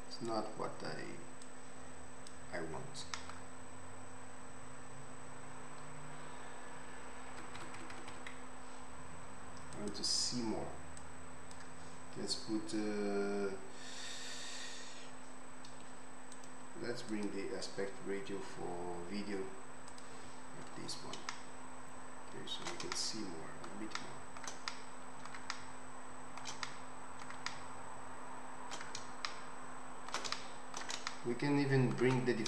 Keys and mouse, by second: 9.7 Escape, 9.7 middle click, 9.9-11.1 right drag, 11.1-16.4 middle drag, 16.4-32.4 drag.